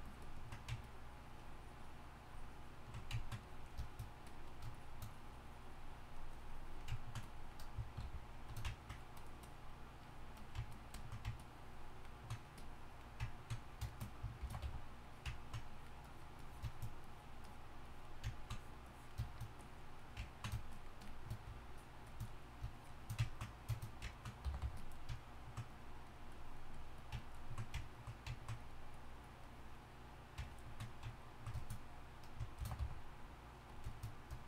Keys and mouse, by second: 8.0 shift+f, 14.4 shift+c, 14.6 f, 15.3-19.3 drag, 24.4 g, 24.8 f, 27.8-30.5 drag, 32.6 shift+c, 32.8 f.